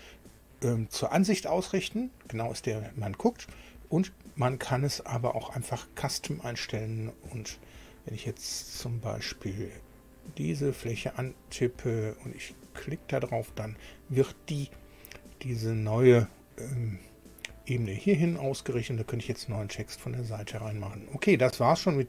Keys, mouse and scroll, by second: 8.6 scroll down 1, 10.5 click, 12.5 click, 15.0-19.1 middle drag, 20.5 middle click, 20.9 scroll down 1.